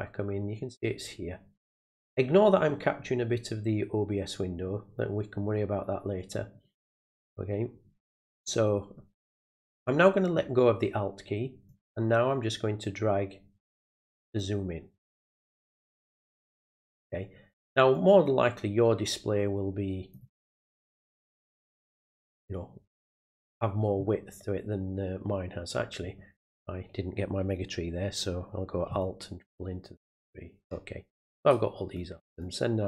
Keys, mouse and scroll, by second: 11.6-14.4 drag, 15.4-17.0 drag, 17.9-20.1 drag, 21.2-22.2 drag, 29.0-31.9 alt+drag, 32.4-32.8 drag.